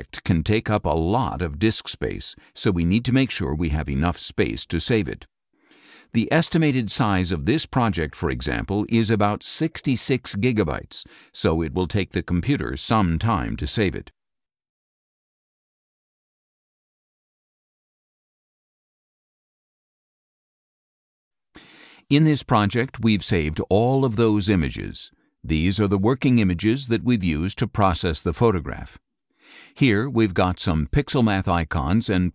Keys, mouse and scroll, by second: 0.5 click, 22.7 click, 28.8-31.3 drag, 31.5 click.